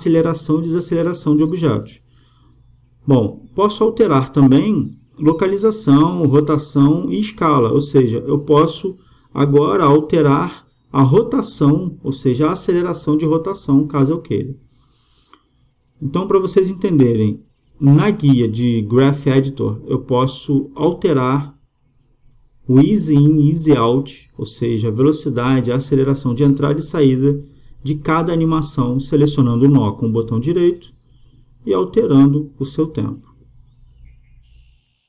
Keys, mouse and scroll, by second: 4.3-6.0 drag, 6.0-8.9 middle drag, 9.4-15.9 middle drag, 10.8-12.7 drag, 10.8-12.7 right drag, 15.2-20.8 drag, 23.2-26.5 drag, 27.3-29.5 middle drag, 29.5-34.1 right drag.